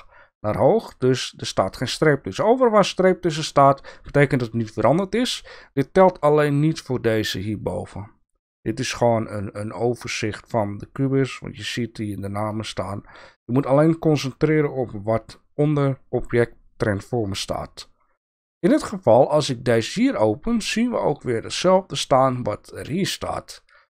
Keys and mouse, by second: 19.8 click.